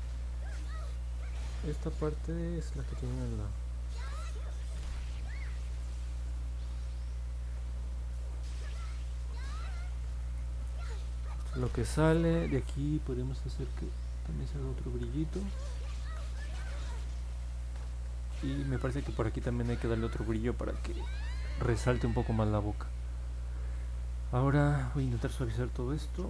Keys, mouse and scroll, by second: 6.6 ctrl+z, 8.0 ctrl+z, 14.2 click, 14.8 ctrl+z, 15.1 click, 15.9 ctrl+z, 16.5 click.